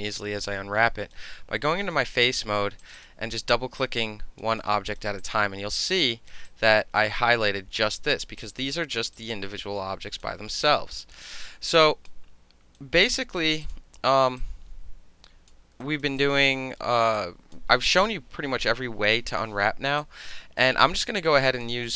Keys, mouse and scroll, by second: 2.8 click, 3.8 alt+click, 4.6 alt+right click, 5.2 alt+click, 6.1 alt+right click, 6.3 alt+middle click, 6.5 alt+click, 7.4-8.5 alt+middle drag, 8.4 alt+click, 8.5 alt+click, 8.6 middle click, 9.1-10.2 alt+drag, 10.2 alt+middle click, 10.6 alt+click, 10.9 alt+middle click, 11.8 alt+drag, 12.8-13.4 right drag, 13.6 click, 14.4-15.5 alt+drag, 15.5-15.8 alt+middle drag, 15.8 alt+right click, 16.0 alt+middle click, 16.2 alt+drag, 16.5-16.8 alt+middle drag, 16.9 alt+middle click, 17.1-17.5 alt+drag, 17.5-19.9 alt+middle drag, 20.0 alt+click, 20.6 alt+right click, 21.1 alt+middle click, 21.2 alt+click, 21.6 alt+middle click, 21.8 alt+click.